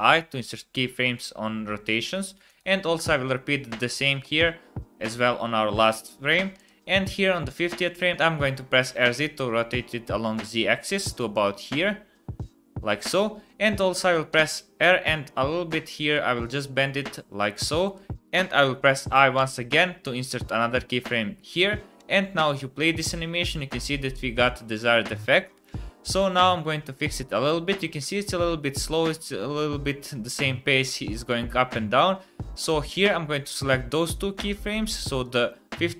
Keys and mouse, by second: 2.4 click, 4.2 i, 6.5 click, 8.8 r, 14.3 r, 18.1 ctrl+z, 18.1 i, 19.4 i, 22.0 space, 32.6 space, 32.9-33.5 drag, 35.2 click.